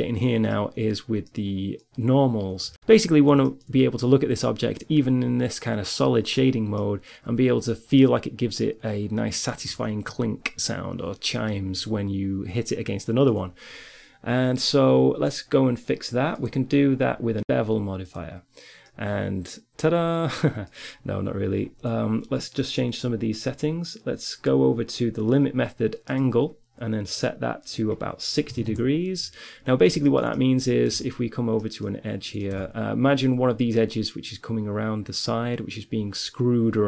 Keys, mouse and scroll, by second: 7.0-16.2 middle drag, 16.6-17.8 drag, 18.6-20.8 middle drag, 26.0-29.7 drag, 30.0 middle click, 31.2 Tab, 32.8 Tab.